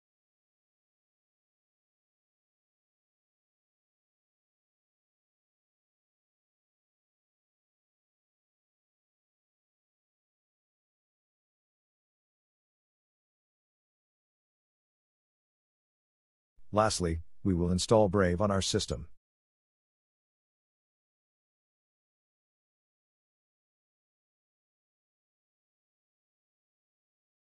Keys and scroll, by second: 8.1 Return.